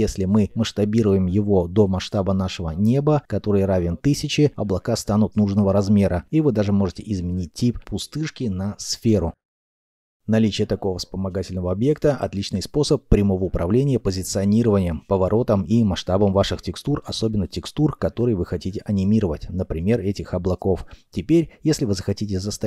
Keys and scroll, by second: 0.6 s, 3.9 KP_1, 4.5 Return, 13.1 r, 13.2 z, 14.5 Escape, 14.8 g, 15.7 y, 16.4 Escape, 17.0 0, 19.1 Escape, 19.5 r, 19.7 z, 20.2 Escape, 21.4 z.